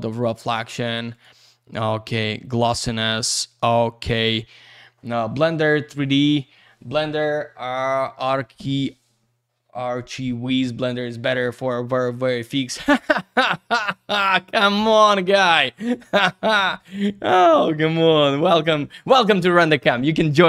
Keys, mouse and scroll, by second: 0.4 click, 1.1 click, 1.8 click.